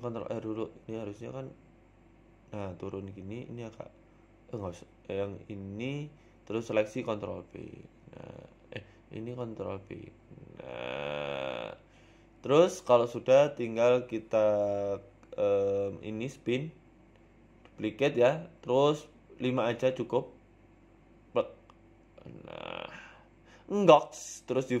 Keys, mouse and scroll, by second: 0.4 ctrl+z, 1.5 ctrl+r, 2.3 click, 2.7 shift+click, 3.3 g, 4.7 click, 5.9 click, 6.4 shift+click, 8.3 ctrl+b, 10.1 shift+click, 10.8 ctrl+b, 12.4 Tab, 12.6-12.9 scroll down 2, 12.9 scroll up 2, 13.5 Tab, 13.5 scroll up 1, 17.2 click, 18.0 click, 20.7 click, 21.2 click, 23.1 a, 23.6 click, 24.1-24.4 scroll down 2, 24.3-24.8 scroll up 3.